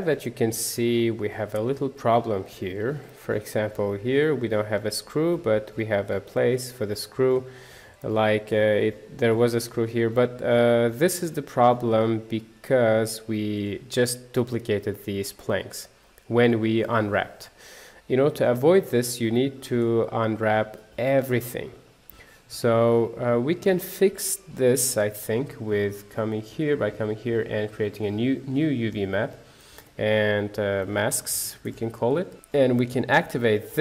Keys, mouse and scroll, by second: 0.4-1.8 shift+middle drag, 1.8-2.2 scroll down 1, 2.2 middle click, 2.8-3.1 scroll up 1, 3.1-4.3 shift+middle drag, 4.3 scroll down 1, 4.5-10.4 middle drag, 10.4-10.8 scroll down 1, 10.8-13.2 middle drag, 13.7 click, 15.4 middle click, 16.2 scroll down 3, 16.5-18.7 middle drag, 18.7-19.1 scroll up 1, 19.1 middle click, 19.9 click, 20.8 Tab, 21.6 middle click, 21.9 Tab, 23.8 middle click, 24.5 click, 28.0-33.4 drag.